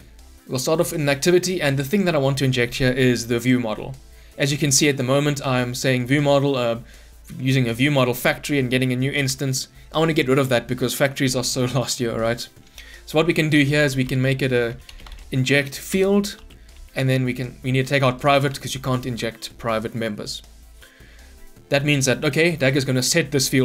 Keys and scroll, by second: 16.0 Return, 17.9 Return, 17.9 ctrl+Delete.